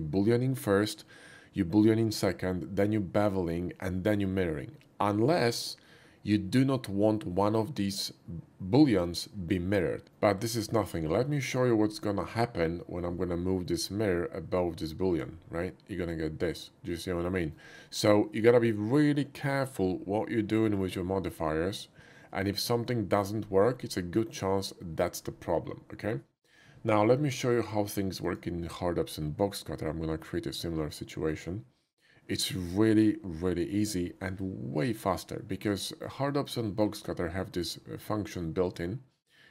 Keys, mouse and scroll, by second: 10.1 middle click, 10.4-10.8 scroll down 1, 10.8 shift+middle click, 11.2 shift+middle click, 13.8-15.2 drag, 16.0-17.5 middle drag, 23.9-25.2 drag, 28.0 click, 28.3 click, 35.4 shift+middle drag, 35.8 shift+middle click, 36.3 shift+middle click, 36.6 shift+middle click, 37.5 shift+click.